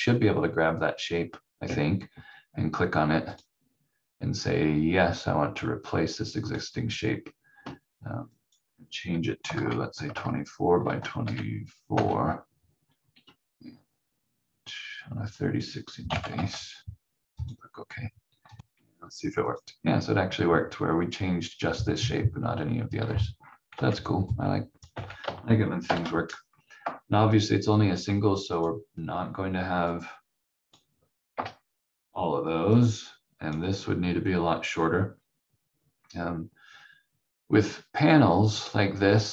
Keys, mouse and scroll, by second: 3.3 click, 6.4 click, 9.2-11.2 typing, 10.1 Tab, 11.9 Tab, 15.3 click, 15.8-16.6 typing, 17.4 click, 18.7 F4, 19.4 click, 23.0-23.3 scroll up 1, 23.7 v, 24.4 click, 24.9 v, 25.8 shift+Page_Up, 28.5 click, 31.3 Delete, 32.7 click.